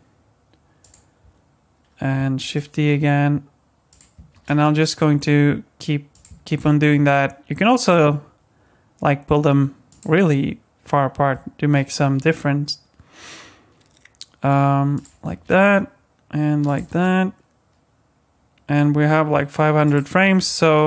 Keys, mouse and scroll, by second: 2.4 shift+d, 4.3 shift+d, 6.5 shift+d, 12.2 shift+d, 15.3 shift+d, 16.9 shift+d, 20.3-20.8 scroll down 23.